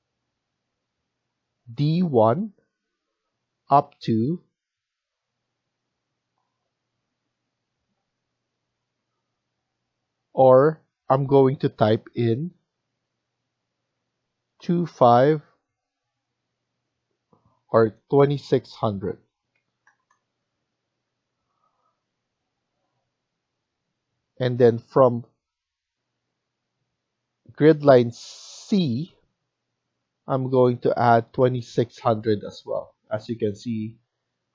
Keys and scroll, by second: 14.5-14.8 typing, 17.9 BackSpace, 19.5-19.8 typing, 20.9 Return, 24.3 Escape, 33.2 Escape.